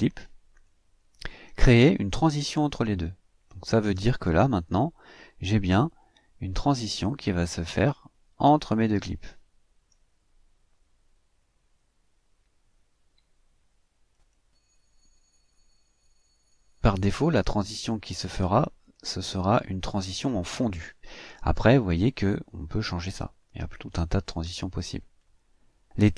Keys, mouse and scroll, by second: 3.9 click, 5.5 click, 10.3 click, 14.1 click, 18.8 click.